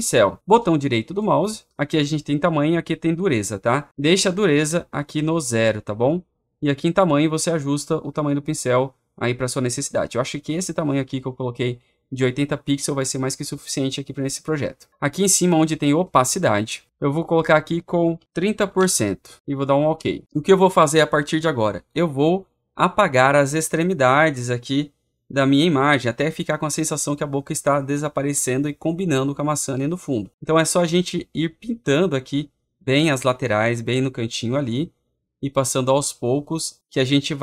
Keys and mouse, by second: 1.2 right click, 31.9 click, 32.8 click, 33.4 click, 34.0 click, 34.6 click.